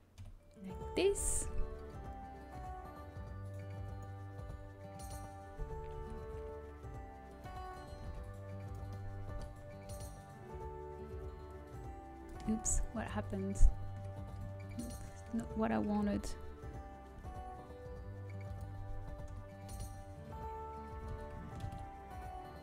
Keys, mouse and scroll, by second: 0.1 KP_1, 1.3 s, 4.6 s, 8.0 g, 8.8-10.4 middle drag, 11.5-13.0 drag, 13.0 ctrl+z, 13.7 ctrl+z, 14.8 ctrl+z, 17.8 s, 19.2 KP_7, 21.2 z, 21.2 s.